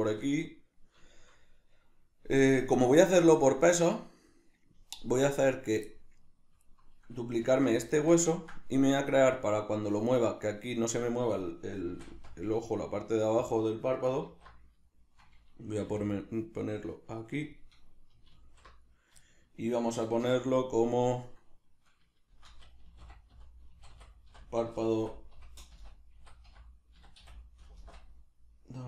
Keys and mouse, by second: 5.5 right click, 5.9-13.5 shift+middle drag, 7.5 alt+q, 11.9 shift+d, 13.5 click, 14.3 alt+q, 14.9-17.5 shift+middle drag, 15.9 g, 17.5 click, 18.3 alt+q, 19.3-28.8 shift+middle drag, 20.2 F2.